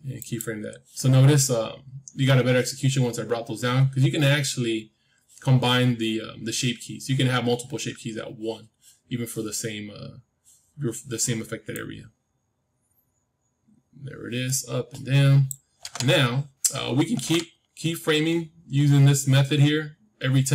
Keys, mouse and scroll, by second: 0.1-2.1 drag, 11.6-13.8 drag.